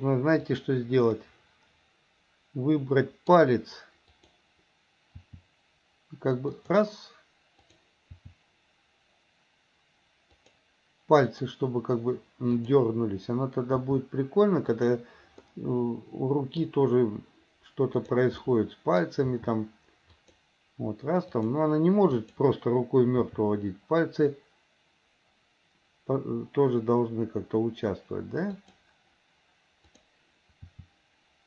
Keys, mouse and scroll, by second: 0.6 drag, 1.4-3.5 middle drag, 4.3 click, 5.4 r, 7.8 click, 8.3 r, 11.5 click, 12.8 click, 13.9 r, 15.6-16.8 middle drag, 18.1 click, 18.6 middle click, 19.4 r, 21.4 click, 22.3 click, 23.4 r, 30.8 r.